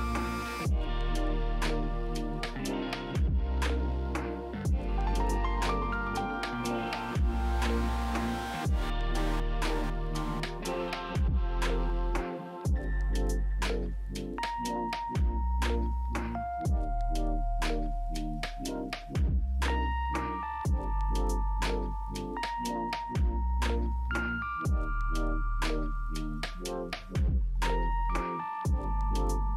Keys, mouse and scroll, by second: 0.1 Return, 5.3 double click, 21.6 z, 22.0 middle click, 22.8 w, 24.8-25.2 scroll down 3, 25.2 middle click, 26.3 alt+middle click, 26.7 alt+middle click, 26.9 alt+middle click, 27.6 alt+middle click, 28.0 Delete.